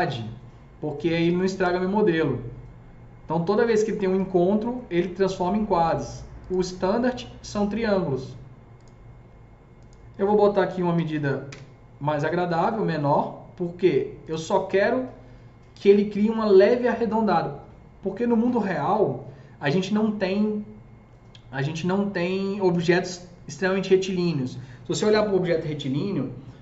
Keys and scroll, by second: 10.7 KP_Decimal, 10.9 KP_2, 11.1 KP_5, 11.4 Return.